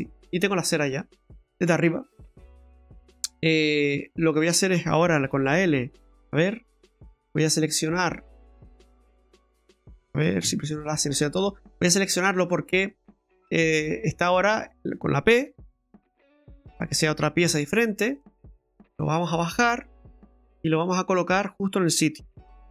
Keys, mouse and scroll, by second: 0.3-0.7 scroll down 3, 2.6-3.3 scroll down 1, 3.4 middle click, 5.5 l, 6.3 scroll down 2, 7.2 right click, 8.7 click, 9.5 right click, 10.4 a, 11.2 right click, 11.9 alt+shift+right click, 12.4 alt+shift+right click, 12.6-13.2 scroll up 6, 13.5 middle click, 14.6-15.1 scroll down 2, 15.1-15.4 scroll down 1, 15.4 p, 16.4-16.8 scroll down 2, 16.8 middle click, 17.4 Tab, 17.8 right click, 18.2 middle click, 19.1 click, 21.1 scroll up 2, 21.4 middle click.